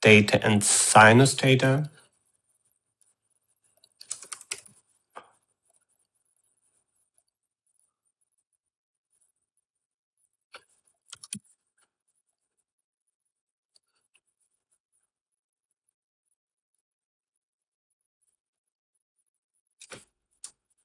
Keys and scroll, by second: 4.5-5.6 typing, 12.1 ctrl+c, 12.2 v, 20.6-20.8 typing.